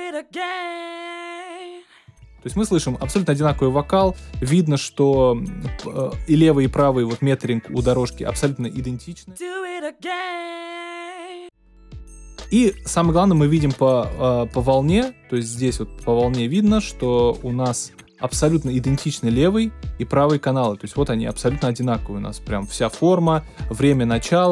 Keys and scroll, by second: 2.0 space, 9.2 space, 11.3 space.